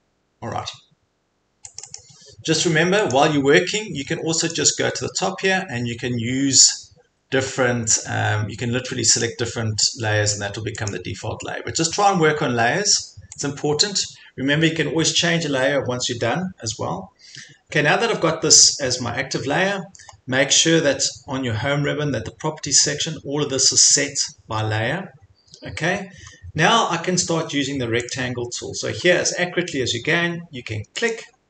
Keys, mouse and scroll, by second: 1.8 click, 2.0 click, 3.1 click, 4.5 click, 9.2 click, 10.9 click, 13.4 click, 28.1 click, 29.0 click, 29.1 scroll down 5, 29.3-29.9 scroll, 31.1 click, 31.4 click, 31.4 click.